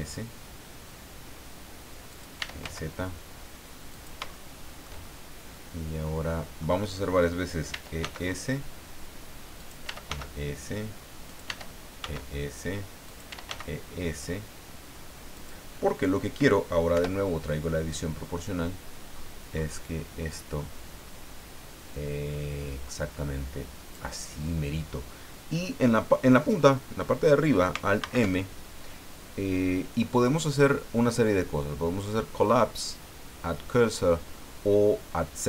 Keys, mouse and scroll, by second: 0.0-0.2 typing, 2.1 click, 2.1-3.1 typing, 3.9 shift+click, 4.3-6.8 shift+middle drag, 7.7 e, 8.0 s, 9.6 click, 9.6-12.0 typing, 11.3 click, 13.0 click, 13.3 e, 15.3 click, 16.9 o, 18.4 click, 19.1-19.9 scroll up 2, 28.0 alt+m.